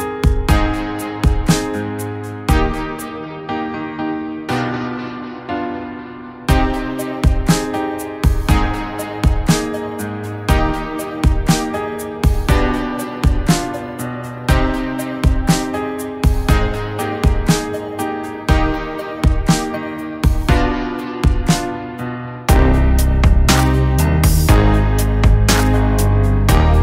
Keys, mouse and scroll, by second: 1.7 click, 3.9 click, 4.0-9.5 drag, 13.8 click, 16.3-16.7 click, 19.0 click, 21.1-22.1 drag.